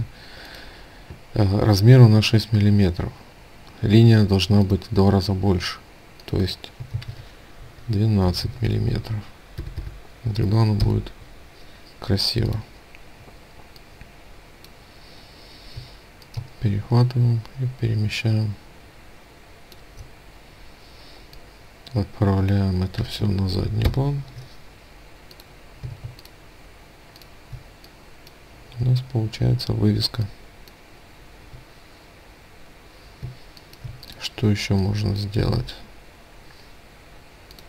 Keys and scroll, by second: 6.4 ctrl+a, 10.3 Return.